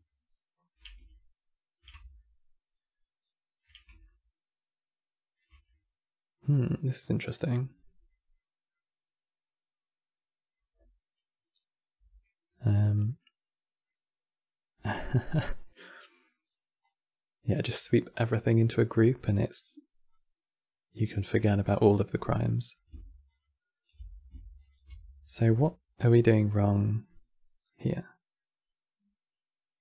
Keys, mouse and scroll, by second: 12.8-14.0 middle drag, 14.0 scroll down 2, 14.4-16.5 middle drag, 16.5 click, 18.8 middle click, 19.8 click, 21.3-23.0 middle drag, 23.0 ctrl+shift+click, 24.3 ctrl+shift+click, 26.8-29.8 middle drag.